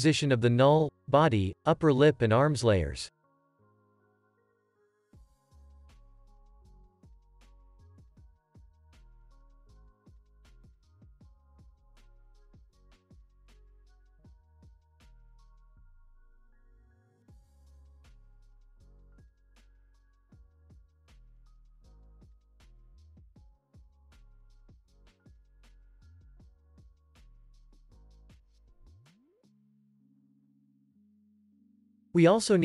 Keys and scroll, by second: 15.3 shift+p, 20.5 u, 24.0 p, 25.3 s, 27.6 ctrl+s, 30.5 ctrl+s.